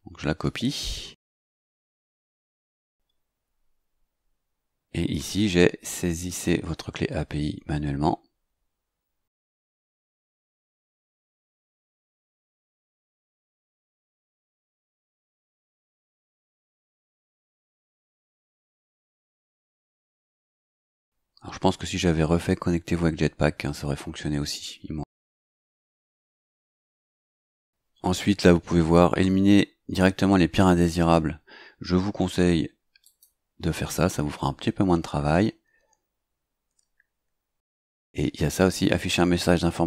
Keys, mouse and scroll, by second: 0.7 ctrl+c, 2.2 click, 12.2 click, 13.5 ctrl+c, 14.3 click, 15.6 ctrl+v, 17.4 click, 32.9 click.